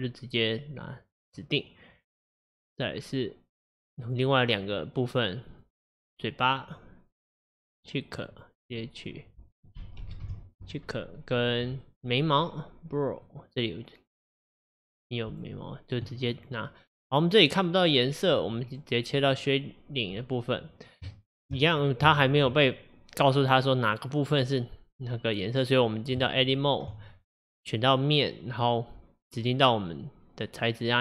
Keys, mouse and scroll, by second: 6.7-11.9 drag, 13.5-17.2 drag, 19.5 click, 21.1-26.9 shift+middle drag, 26.9 Tab.